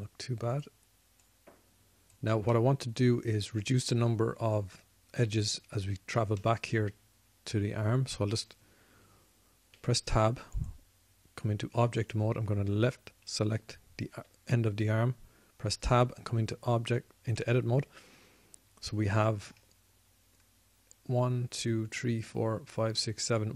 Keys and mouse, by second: 2.4-4.4 drag, 4.4-11.0 middle drag, 11.6 Tab, 15.8 Tab, 19.8-20.8 middle drag.